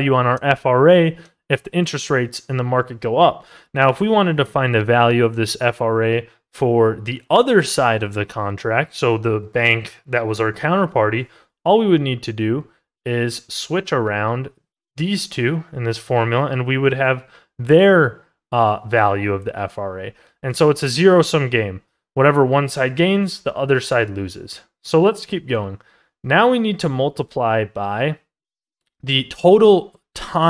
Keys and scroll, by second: 22.8 ctrl+z.